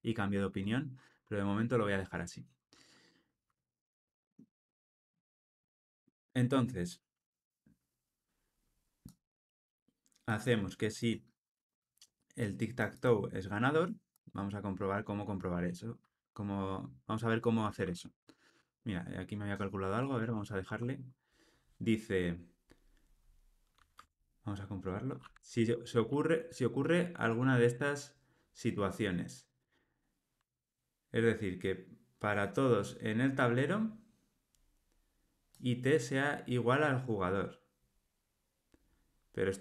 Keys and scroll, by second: 23.9 Tab.